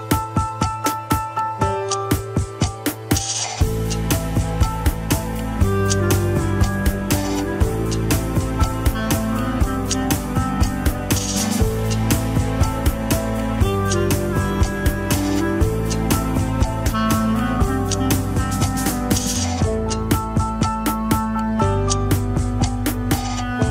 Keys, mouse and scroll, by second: 5.5-5.9 scroll up 2, 6.3 ctrl+s, 6.4 scroll down 4, 6.6-9.1 middle drag, 10.2-11.8 middle drag, 11.8 click, 12.7 click, 15.9 KP_3, 16.8 a, 17.1 alt+r, 17.5 alt+g, 17.8-18.3 scroll down 2, 18.3-18.9 shift+middle drag, 18.9-19.4 scroll up 1, 19.4 ctrl+Tab, 19.9 ctrl+s, 21.5-23.4 shift+middle drag, 23.4 KP_1, 23.5 scroll down 2.